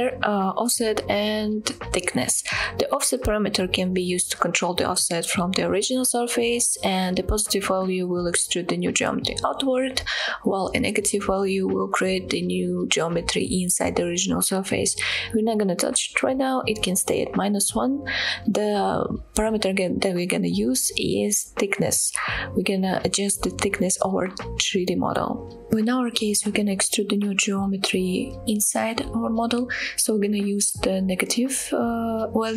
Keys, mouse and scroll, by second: 24.5 scroll down 1, 24.8-25.1 middle drag, 25.3-27.8 scroll up 2, 28.8-32.5 shift+drag.